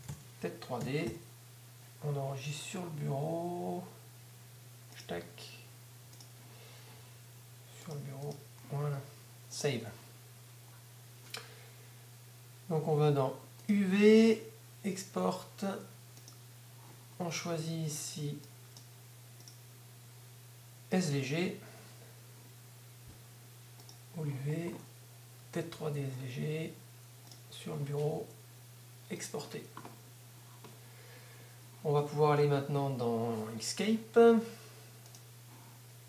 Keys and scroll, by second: 0.9-1.7 typing, 2.8-3.5 typing.